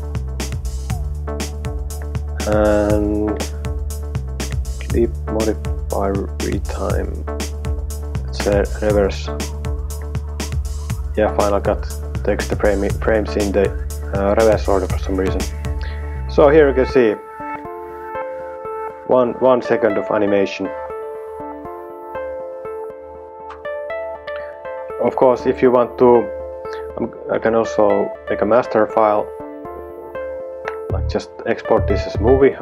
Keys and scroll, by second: 15.6 space, 23.9 space.